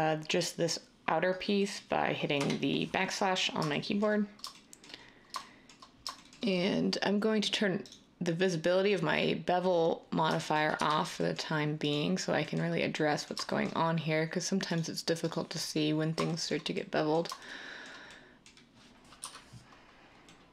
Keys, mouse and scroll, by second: 2.3 \, 10.7 Tab, 19.2 scroll.